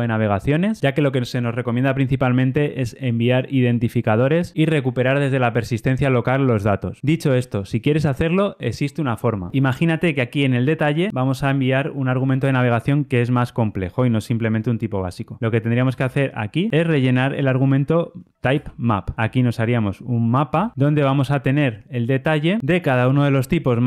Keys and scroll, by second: 18.4 Return, 20.4 Return.